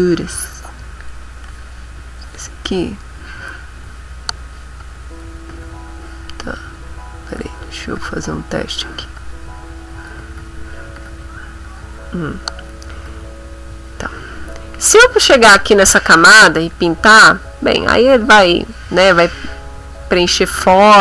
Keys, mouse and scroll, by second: 1.0 click, 3.5 click, 4.8 click, 5.7 ctrl+z, 7.3 click, 7.9 click, 8.7 click, 9.1 click, 10.4 ctrl+z, 12.7 middle click, 13.2-14.4 ctrl+middle drag, 13.2 ctrl+scroll, 14.6 middle click, 16.7-21.0 drag.